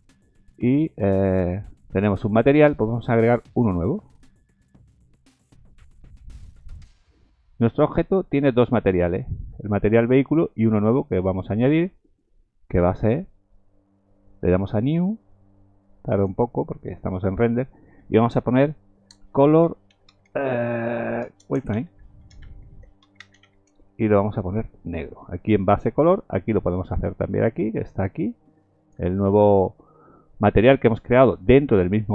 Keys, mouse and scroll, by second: 3.5 click, 12.0 click, 16.1 click, 27.2-27.6 scroll up 4, 28.3 click, 29.1-29.9 scroll up 9.